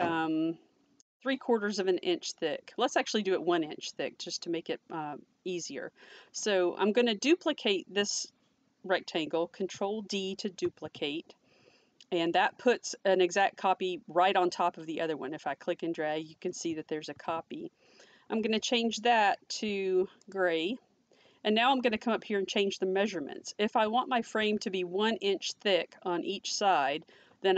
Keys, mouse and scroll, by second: 10.6 ctrl+d, 13.4 ctrl+d, 13.5 click, 17.1 ctrl+z, 20.2 ctrl+z, 20.5 click.